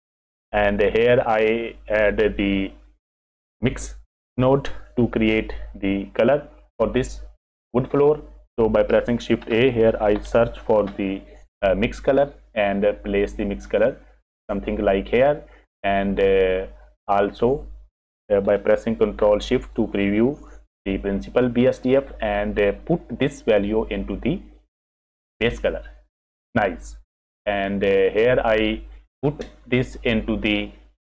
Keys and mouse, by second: 9.4 shift+a, 14.7 click, 19.6 ctrl+shift+click, 20.5 click, 22.6 click, 22.9-25.6 drag, 28.0 click, 30.6 click, 31.0 click.